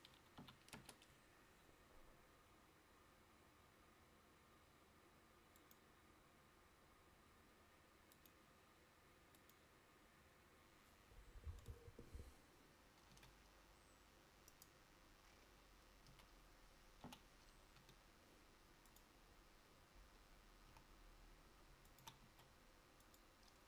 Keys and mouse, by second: 14.7 click, 16.2 a, 17.1 l, 20.8 s.